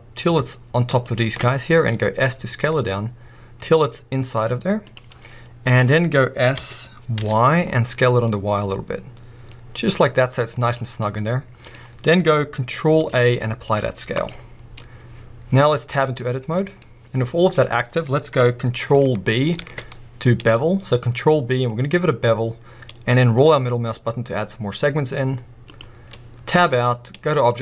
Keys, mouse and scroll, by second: 1.0-1.9 scroll up 1, 1.9 s, 4.9 click, 5.1 scroll down 1, 5.3-10.7 middle drag, 5.8-6.6 scroll up 2, 6.6 s, 10.7 click, 10.9 scroll down 1, 13.1 ctrl+a, 15.9 b, 16.2 middle click, 16.8-17.5 scroll up 1, 19.6 ctrl+b, 25.8 click, 26.6 Tab, 27.5-27.6 drag.